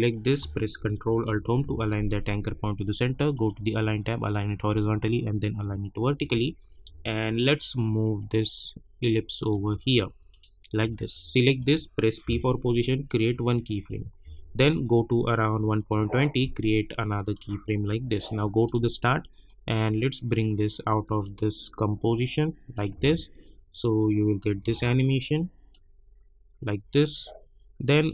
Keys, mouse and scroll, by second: 1.4 ctrl+alt+Home, 3.3 click, 6.1 v, 6.6-10.3 drag, 12.2 p, 13.0 click, 14.2 =, 15.7-23.0 drag, 23.0 space, 25.7-28.1 drag.